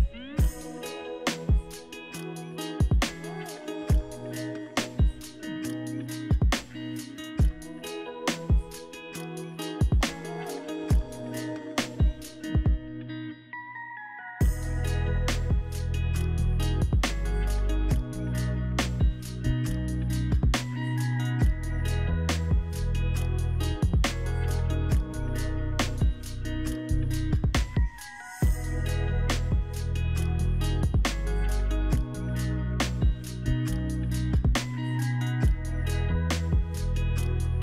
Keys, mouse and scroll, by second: 4.1 shift+7, 5.8 alt+middle click, 6.4-6.8 alt+scroll up 4, 7.0-7.6 scroll down 4, 9.4 Delete, 10.7 middle click, 22.1 scroll up 1, 24.1 scroll up 1, 24.1 &, 25.2 alt+middle click, 28.7 Delete, 29.2 scroll, 29.3-29.9 scroll down 4, 29.9 alt+middle click, 30.3 alt+middle click, 34.6 alt+middle click, 35.1 scroll up 3.